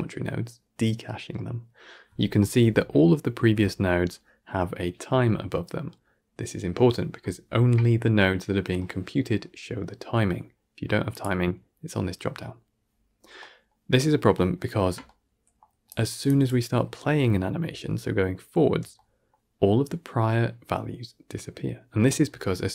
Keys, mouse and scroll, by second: 15.8-16.1 drag, 17.9-22.2 alt+scroll down 1.